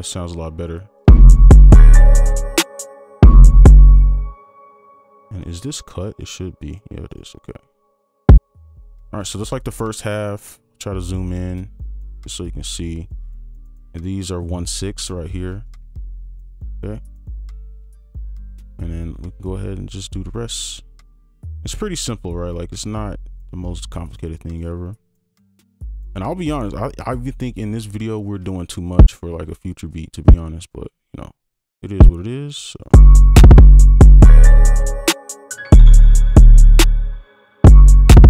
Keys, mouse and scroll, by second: 1.0 space, 2.4 right click, 3.2 space, 6.2 right click, 13.7 ctrl+click, 15.6 right click, 24.5 right click, 27.9 alt+click, 32.9 space, 37.1 space.